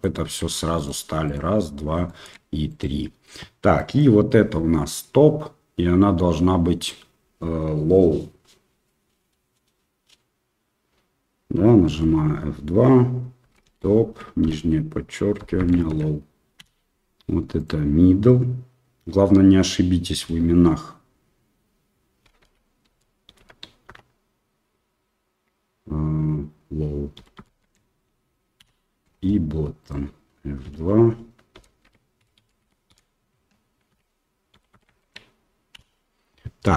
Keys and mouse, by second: 0.3 Tab, 2.0 shift+middle click, 3.7 middle drag, 11.8 F2, 20.2 F2, 30.6 F2, 32.3 t.